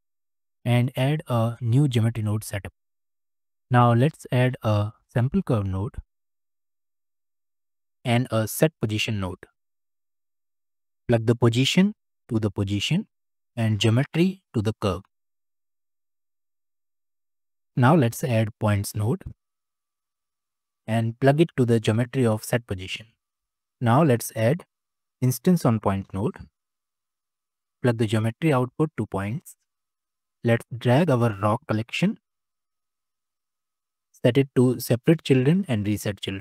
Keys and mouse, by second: 1.3 click, 3.1 click, 4.3 shift+a, 8.2 shift+a, 11.5-12.8 drag, 13.9 click, 14.1-15.0 drag, 15.9 click, 16.8 click, 17.3 click, 18.0 shift+a, 21.2-22.4 drag, 23.3 click, 23.6 shift+a, 28.0 click, 28.2-28.8 drag, 29.7 middle click, 33.1 middle click, 34.1 click, 35.7-36.1 drag.